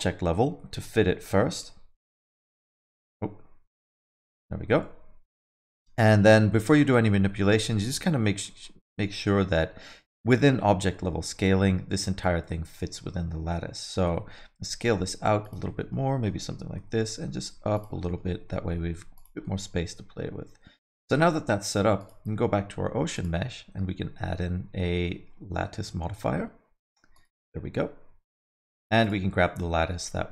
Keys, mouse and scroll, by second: 0.2 s, 1.6 Escape, 2.0 x, 3.8 s, 6.2 alt+middle click, 6.5 middle click, 6.8 alt+middle click, 7.3 scroll up 1, 7.4 alt+middle click, 7.7 middle click, 8.4 alt+middle click, 10.9 middle click, 13.9 s, 15.6 alt+middle click, 16.0 middle click, 16.7 s, 18.0 middle click, 18.3 g, 19.4 alt+middle click, 21.0 middle click, 22.0 click, 23.1 click, 28.4 click, 29.4 middle click, 29.7 alt+middle click, 30.0 middle click.